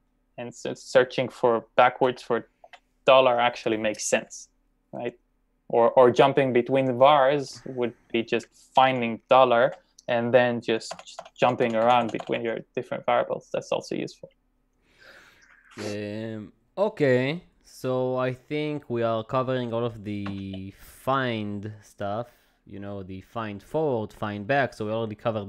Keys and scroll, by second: 2.1 shift+f, 2.6 shift+4, 8.8 f, 9.6 shift+4, 11.1-12.0 typing, 20.3 shift+d.